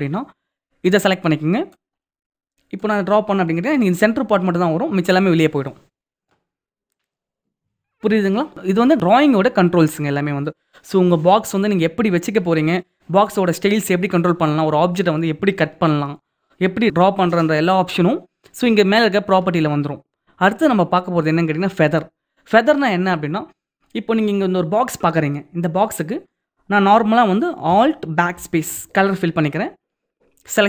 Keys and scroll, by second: 27.9 alt+BackSpace.